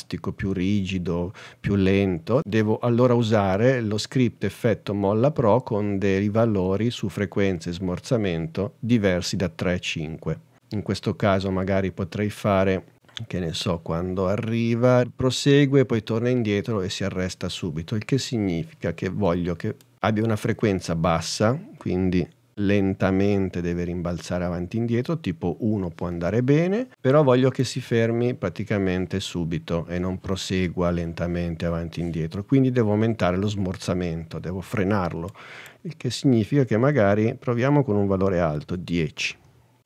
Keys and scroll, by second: 38.7 i, 39.4 o.